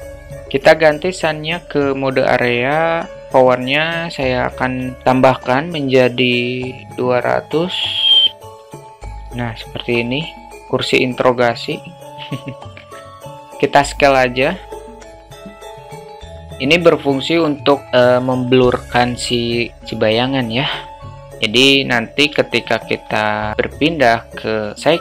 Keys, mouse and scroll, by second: 1.6 click, 3.3-9.2 drag, 8.0 0, 9.6 alt+shift+middle click, 13.6 s, 22.5-22.8 alt+shift+middle drag, 23.9 click, 24.5-25.0 drag.